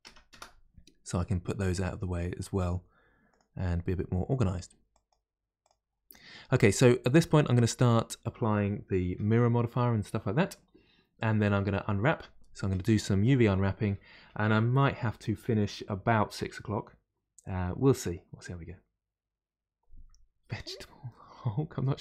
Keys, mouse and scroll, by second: 0.3 Return, 3.3 click, 4.9 click, 5.6 click, 6.1 middle click, 6.5-7.2 scroll up 1, 7.2-10.6 shift+middle drag, 12.7-15.7 middle drag.